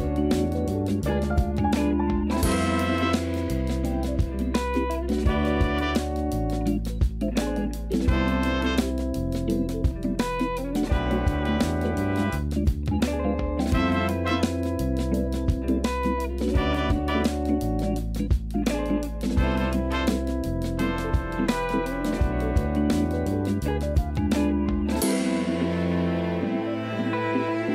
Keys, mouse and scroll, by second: 0.3 a, 0.5 a, 0.7-1.2 scroll up 2, 1.2-2.4 shift+middle drag, 2.4 2, 2.7 click, 3.6 KP_2, 4.7 KP_3, 5.7 g, 7.3 a, 7.5 a, 7.9 Tab, 8.2 KP_1, 11.9 a, 12.0 a, 12.4 z, 12.7 b, 13.7-14.2 scroll up 1, 14.2 shift+middle click, 14.9 s, 16.6-17.7 scroll down 3, 17.7-19.1 typing, 18.5 Tab, 19.3-20.4 scroll up 4, 20.4-21.0 shift+middle drag, 21.0-24.1 scroll down 2, 26.9 Tab.